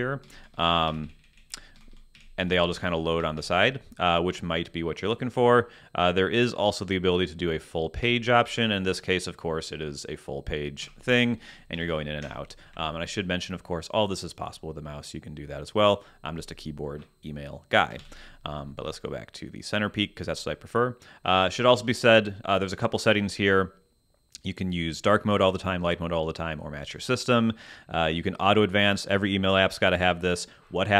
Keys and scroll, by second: 1.7 Down, 8.0 Escape, 10.8 Escape, 11.4 Down, 12.2 Return, 12.7 Escape, 18.0 super+,.